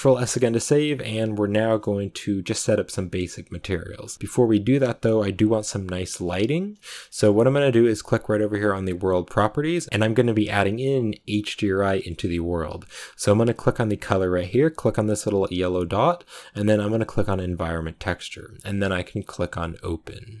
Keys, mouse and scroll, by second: 17.5-20.4 drag.